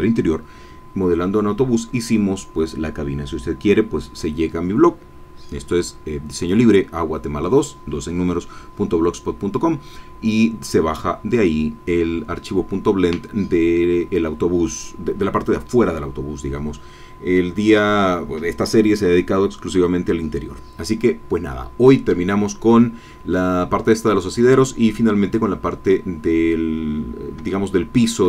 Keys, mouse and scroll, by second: 27.5 shift+click.